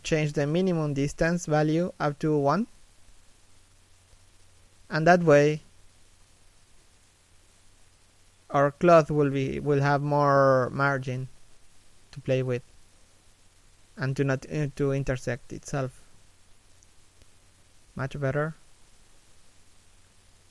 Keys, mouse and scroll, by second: 1.3-3.2 scroll down 1, 8.4-10.5 scroll up 1, 10.5 middle click, 11.8 middle click, 16.8-17.1 scroll down 1, 17.1 middle click.